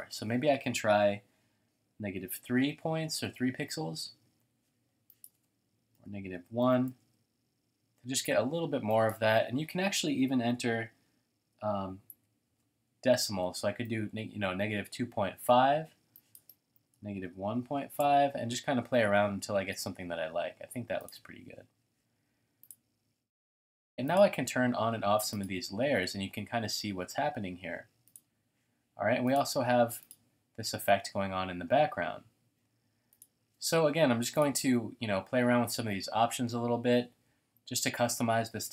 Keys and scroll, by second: 1.6-3.3 typing, 5.7-7.1 typing, 10.6 typing, 11.9-14.6 typing, 16.6-18.2 typing.